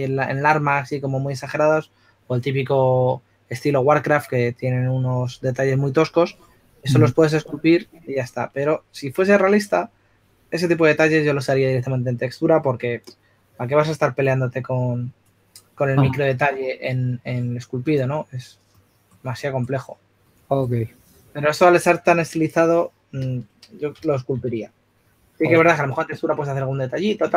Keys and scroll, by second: 25.0-26.2 typing.